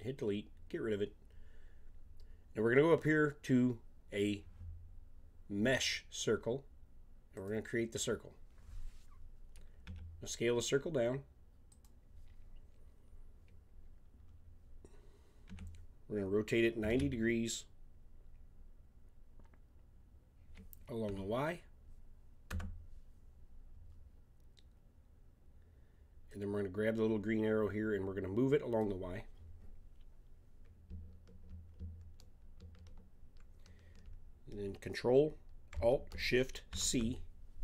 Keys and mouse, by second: 7.3-9.2 drag, 9.8 s, 14.0-15.4 middle drag, 15.4 r, 26.3-28.0 drag, 36.7 ctrl+alt+s.